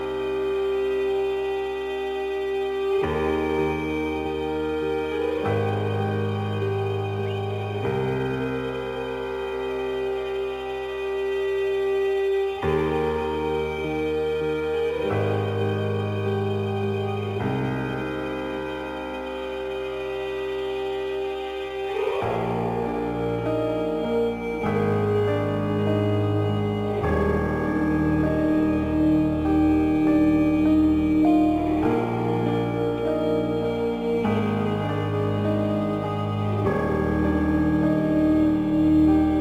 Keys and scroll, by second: 9.9 ctrl+t, 18.2 ctrl+t, 32.5 ctrl+t.